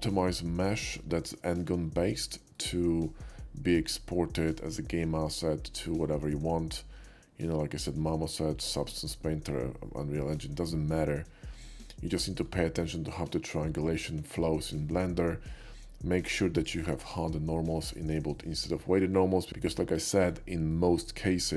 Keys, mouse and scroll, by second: 1.0-1.3 shift+middle drag, 2.6-7.1 shift+middle drag, 8.9-9.6 middle drag, 9.9-12.5 middle drag, 14.6-15.4 middle drag, 16.6 click, 20.8-21.5 middle drag.